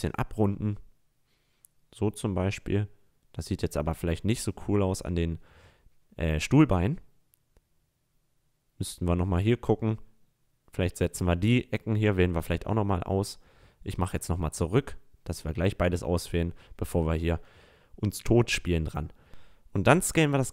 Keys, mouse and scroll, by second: 1.8-3.2 middle drag, 3.5-4.0 middle drag, 5.9 a, 6.3-7.3 middle drag, 7.4 middle click, 7.7 middle click, 8.4-8.8 middle drag, 9.5 right click, 11.9 ctrl+z, 12.4 ctrl+z, 12.8 ctrl+z, 13.2 ctrl+z, 15.3 drag, 15.6 middle click, 17.3-17.8 middle drag, 18.2 s.